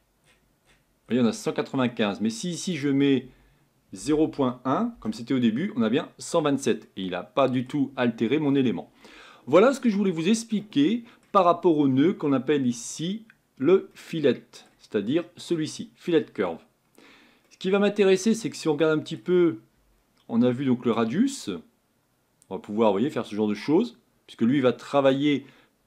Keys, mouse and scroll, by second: 4.9-6.8 drag, 6.8-7.9 middle drag, 7.9-8.4 scroll up 6, 8.4-9.0 scroll down 3, 9.0-22.0 middle drag, 22.0-24.0 drag.